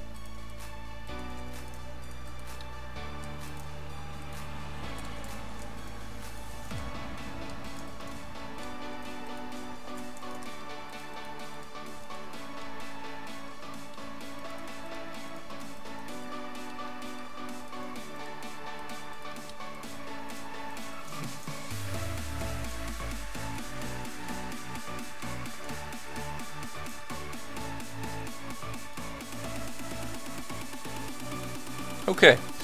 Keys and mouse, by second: 1.3 f, 3.2 f, 5.3 ctrl+z, 6.7 f, 8.1 f, 9.5 f, 9.9 ctrl+z, 10.4 f, 12.1 f, 16.2 f, 16.3 click, 20.4 f, 21.1 f, 22.4 f, 24.6 click, 25.3 ctrl+z, 26.3 click, 26.7 f, 30.2 f, 31.6 a.